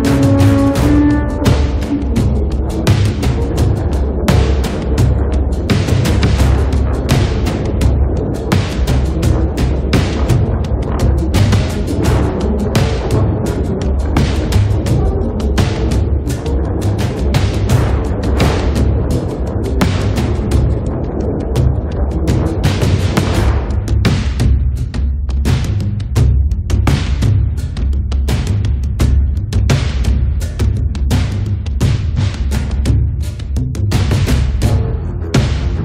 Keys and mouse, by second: 0.5 middle click, 1.5 middle click, 2.0-3.6 drag, 3.1-5.5 middle drag, 3.1 right click, 4.5-5.7 drag, 4.5-5.5 right drag, 5.5 1, 5.7 f, 6.3-8.9 drag, 8.9-9.9 middle drag, 9.9 click, 10.7 middle click, 10.8 click, 11.3 middle click, 11.9 click, 12.6 middle click, 13.1 click, 13.6 middle click, 13.7 f, 14.0-15.2 drag, 16.3 click, 16.9 right click, 17.3 right click, 17.8 click, 18.3 middle click, 18.3 right click, 18.9-19.9 drag, 18.9 right click, 19.7 middle click, 19.7 right click, 20.1 f, 21.3 KP_1, 22.5-24.5 drag, 23.5-24.7 middle drag, 23.5-24.5 right drag, 25.3 middle click, 25.4 click, 25.4 right click, 26.2 middle click, 26.3 click, 26.3 right click, 27.1 middle click, 27.4 f, 28.3 f, 28.8 f, 29.2-30.3 drag, 30.9 ctrl+z, 31.0 ctrl+z, 31.1-32.3 ctrl+z, 31.6 click, 32.6 click, 33.3-34.9 drag, 34.9-35.8 middle drag, 35.3 f.